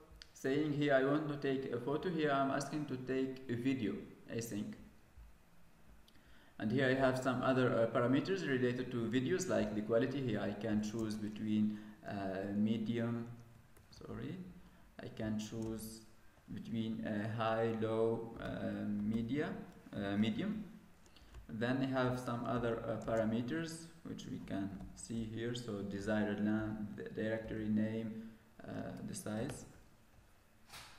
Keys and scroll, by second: 15.5 ctrl+space, 20.1 ctrl+space, 22.9 ctrl+space.